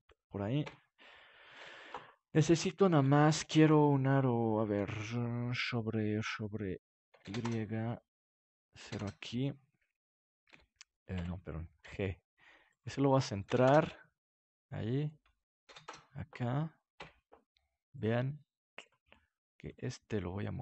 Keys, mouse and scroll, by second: 0.1 click, 0.6 KP_Decimal, 1.5 KP_7, 1.6 click, 1.7 middle click, 6.9-10.4 drag, 10.4 r, 11.8 g, 12.7-14.2 drag, 14.2 middle click, 14.8 click, 15.1 middle click, 15.5-17.4 drag, 16.9 KP_Decimal, 17.9-20.6 drag.